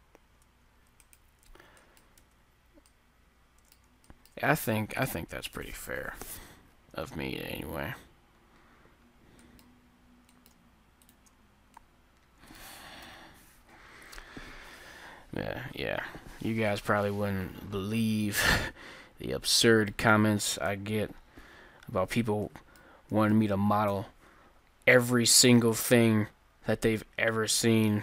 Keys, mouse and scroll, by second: 2.3 Tab, 5.0 KP_1, 9.2-14.7 middle drag, 11.0-12.7 drag, 13.0 KP_1, 17.3-20.4 middle drag, 20.7 KP_3, 21.9 middle click, 23.9 KP_1, 27.3-28.0 drag.